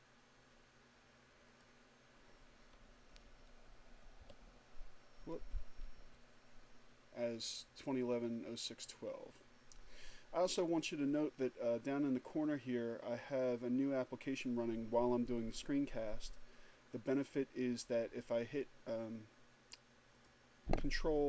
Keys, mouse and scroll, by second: 1.6 click, 4.3 BackSpace, 5.3 BackSpace, 20.2 click.